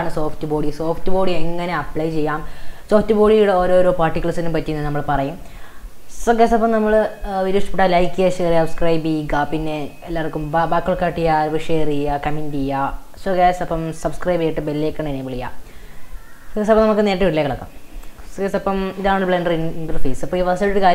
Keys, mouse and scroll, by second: 18.4-20.9 middle drag.